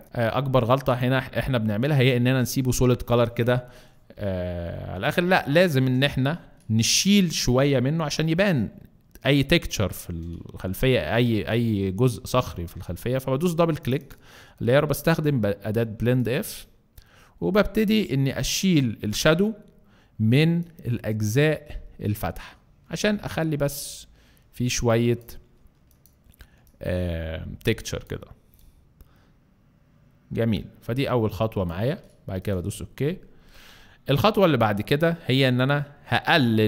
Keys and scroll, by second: 0.4 alt+space, 12.2 alt+space, 36.3 alt+space.